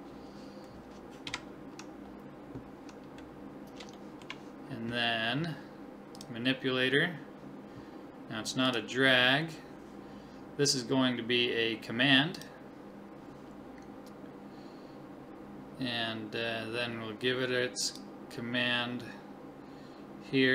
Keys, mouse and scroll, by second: 1.3 KP_1, 3.3 middle click, 6.2-8.0 drag, 8.0 middle click, 8.7-10.3 drag, 17.9-19.6 drag.